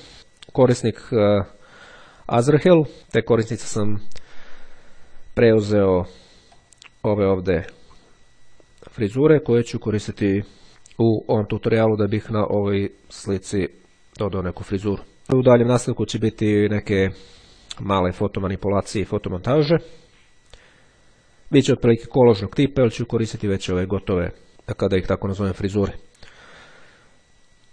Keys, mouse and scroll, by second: 5.8 click, 10.7 click, 22.0-23.4 drag.